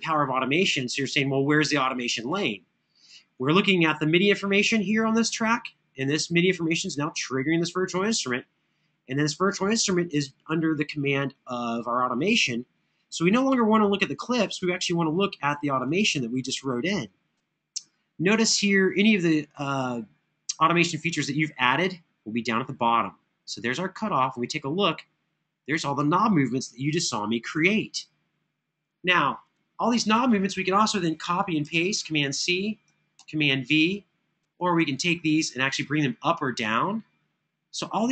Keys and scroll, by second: 31.5 super+c, 32.9 super+v.